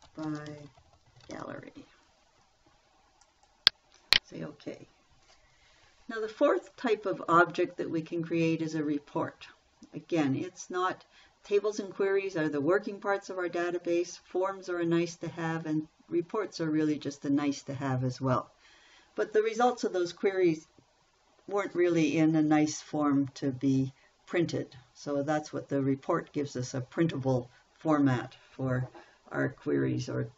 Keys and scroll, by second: 0.0-2.3 typing.